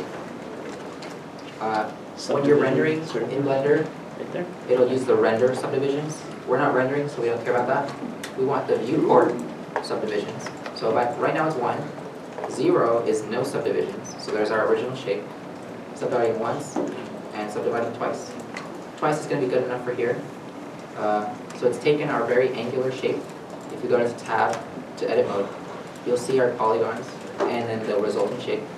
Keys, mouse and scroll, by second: 12.6 middle click, 12.7 0, 13.0 Return, 13.7 middle click, 18.5 middle click, 22.3 Tab, 22.9 middle click, 25.9 middle click.